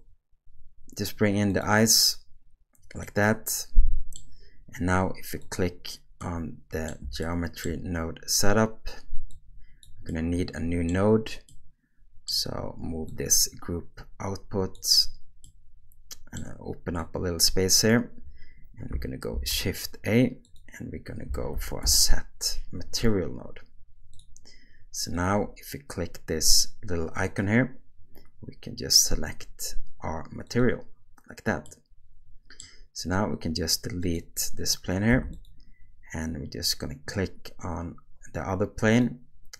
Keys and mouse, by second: 3.0-4.1 middle drag, 5.4 click, 6.2-6.9 middle drag, 7.2-7.6 shift+drag, 9.3 click, 10.2 middle click, 11.6 middle click, 13.1-14.8 drag, 15.5 middle click, 17.0 click, 19.3 shift+a, 27.2-30.7 drag, 31.7-32.6 middle drag, 34.0 click, 35.1 x, 38.9 click.